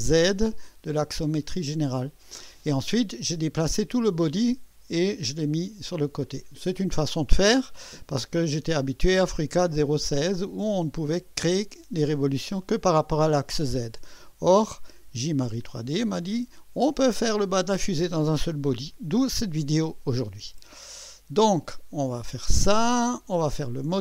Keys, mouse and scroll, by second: 20.8 click.